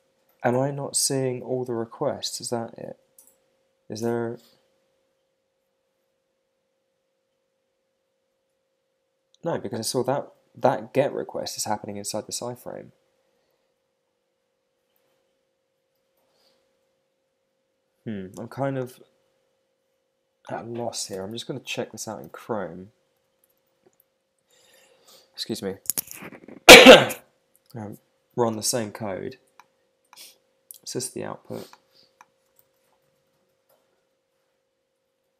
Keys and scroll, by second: 21.1 super+c, 21.3 super+Tab, 22.2 super+n, 23.1 super+v, 23.4 Return, 32.6 alt+super+i.